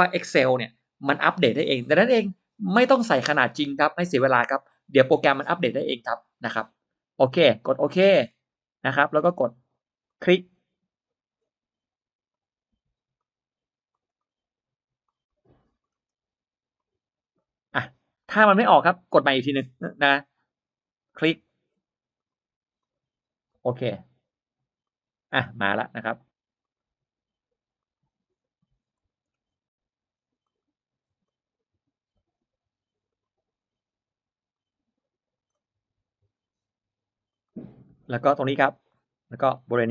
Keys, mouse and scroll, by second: 8.2 click, 10.0 click, 12.2 click, 13.0 click, 13.8 click, 14.9 click, 15.7-16.0 scroll up 1, 16.6 click, 18.1-18.9 drag, 20.9 click, 22.0 click, 22.7 click, 23.4 click, 24.7 click, 25.2-25.5 scroll down 1, 26.5 click, 27.7 drag, 28.8 click, 29.1-29.4 scroll down 1, 30.3 click, 31.1 click, 32.0-33.0 drag, 33.4 middle click, 34.4-35.4 drag, 36.2-37.3 drag, 37.8 middle click, 38.6 click.